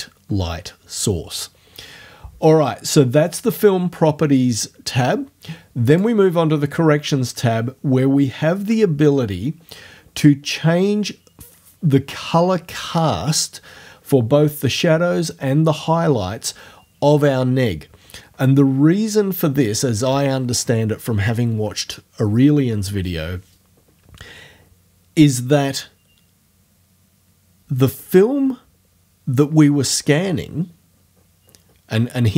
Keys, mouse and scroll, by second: 5.9 click.